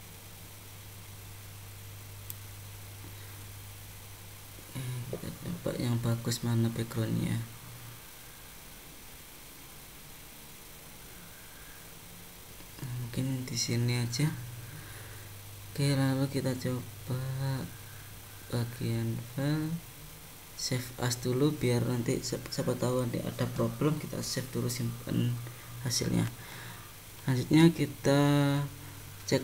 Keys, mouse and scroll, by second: 1.6 middle click, 18.4 click, 27.8 click, 29.3-29.4 scroll down 8.